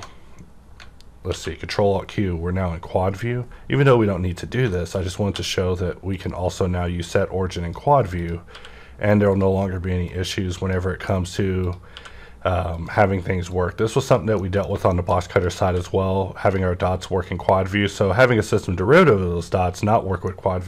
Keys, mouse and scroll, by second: 1.3 ctrl+alt+q, 3.2 scroll up 1, 4.3 scroll down 1, 4.7 shift+middle click, 5.3 q, 6.1 click, 7.0-8.5 drag, 8.5 q, 9.2 click, 10.1-11.6 drag, 11.1 middle click, 11.9 q, 12.7 click, 13.5-14.9 drag, 14.4 middle click, 14.9 shift+middle click, 15.2 click, 15.6 q, 16.4 click, 17.2-20.6 drag, 20.2-20.6 middle drag.